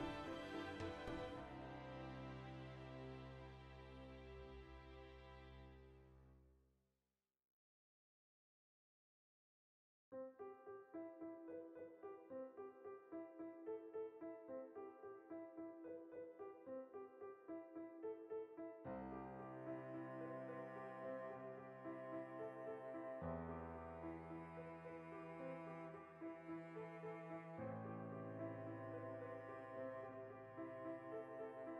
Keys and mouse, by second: 0.1 shift+right click, 0.9 g, 1.5 click, 1.7-2.9 shift+middle drag, 2.9 right click, 3.3 g, 3.7 click, 4.1-12.1 middle drag, 12.0 3, 12.1-14.2 shift+right drag, 14.2 x, 14.5 middle click, 14.9 2, 15.0 right click, 15.4 f, 15.6-18.6 middle drag, 17.5 ctrl+r, 18.5 click, 18.6 ctrl+r, 19.9 right click, 20.0 ctrl+z, 20.2-22.4 middle drag, 22.4 right click, 23.1 3, 23.3-25.6 shift+right drag, 25.6-28.6 middle drag, 25.8 x, 27.9 ctrl+r, 28.6 click, 28.9 ctrl+r, 29.3 click, 29.4 shift+middle click, 29.8 right click, 30.2 f, 30.9-31.7 shift+middle drag, 31.1 f.